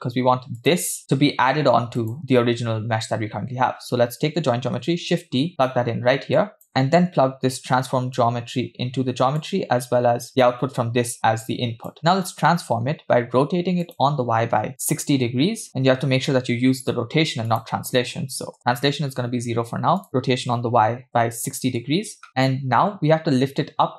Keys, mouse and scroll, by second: 2.0 click, 4.6 shift+d, 6.4 click, 6.7 middle click, 8.2-9.4 drag, 10.5-12.4 drag, 12.5-13.8 scroll up 1, 13.8 scroll up 1, 13.9-15.7 drag, 15.9-17.3 scroll up 1, 17.5-18.6 drag, 20.0-21.7 drag, 22.3 middle click, 22.3 scroll up 4.